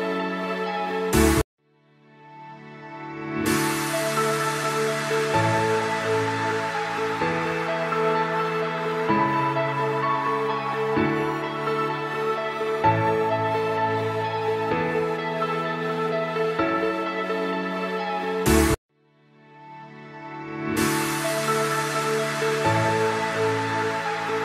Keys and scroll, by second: 0.3 Page_Down, 1.9 Escape, 2.5 shift+Page_Down, 2.9 ctrl+Page_Up, 7.3 F3, 7.9 F2.